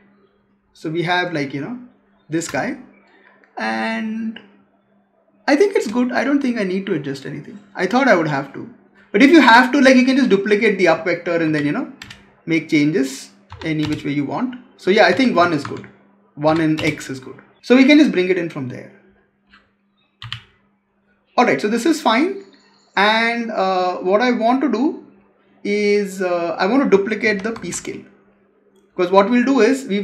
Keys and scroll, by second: 2.3 space, 15.3 Tab, 20.1 Delete, 27.2 ctrl+c, 27.4 ctrl+v.